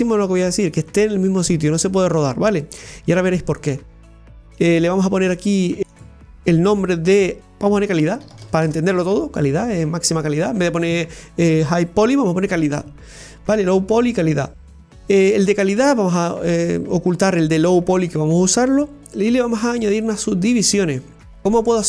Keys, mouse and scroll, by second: 4.5 click, 4.8-5.8 right drag, 5.8-7.4 drag, 16.2 click, 19.1-21.4 drag, 21.4 middle click.